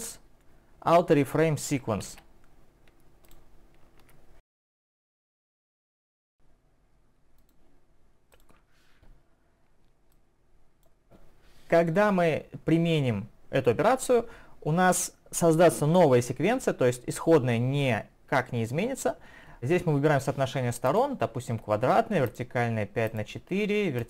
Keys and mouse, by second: 8.3 click.